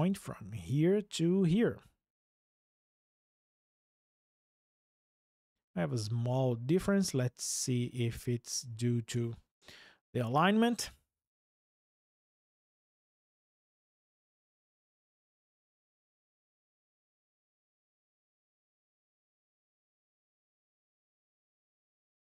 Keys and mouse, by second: 0.5 ctrl+click, 9.8 Delete.